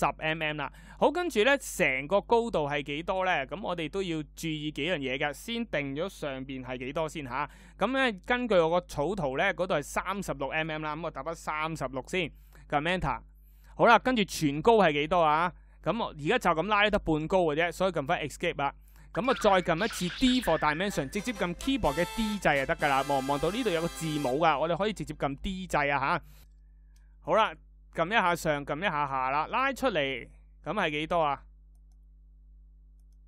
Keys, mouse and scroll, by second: 11.5 Return, 20.6 d.